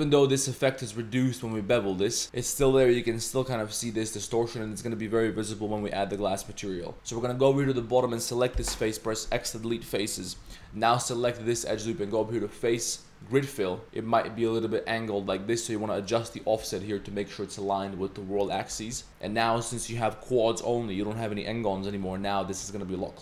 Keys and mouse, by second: 1.6 Tab, 2.0 click, 4.5 click, 6.8 Tab, 6.9 3, 7.1 Tab, 7.6 Tab, 7.9 click, 8.5 x, 10.3 1, 11.0 alt+click, 12.1-13.8 drag, 16.0-16.7 drag, 19.0 Tab, 19.1 Tab, 22.1 Tab, 23.0-23.2 drag.